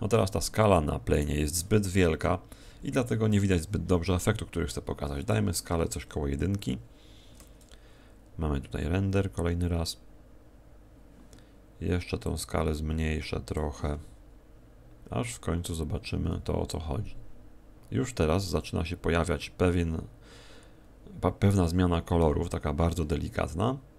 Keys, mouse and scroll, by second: 0.1 Escape, 1.1 right click, 2.0 KP_0, 4.1 click.